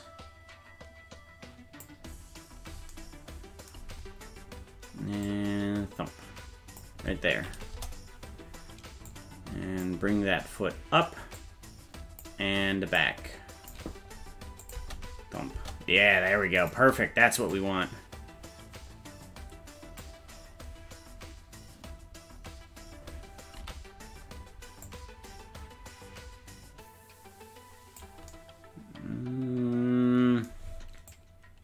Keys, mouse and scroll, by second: 4.2-4.6 scroll down 2, 5.2-6.8 drag, 7.7 KP_0, 9.1 click, 11.4 click, 13.0 click, 14.6-15.7 drag, 14.7 space, 15.5 space, 16.7 right click, 17.5-20.0 drag, 24.9-28.0 drag, 31.1-31.6 drag.